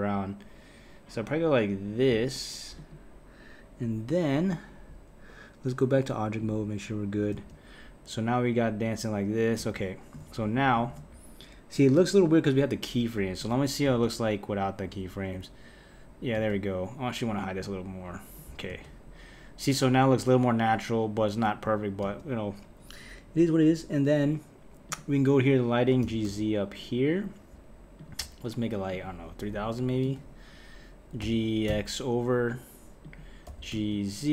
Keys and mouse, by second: 5.9-7.3 drag, 7.3 space, 9.6 space, 10.4 Left, 10.7 Left, 12.3-13.8 drag, 13.8 space, 16.4 space, 17.6-18.7 drag, 18.7 space, 22.0 space, 24.9 click, 26.0 g, 28.9 click, 29.7 KP_0, 29.8 KP_0, 31.2 g, 33.5 g.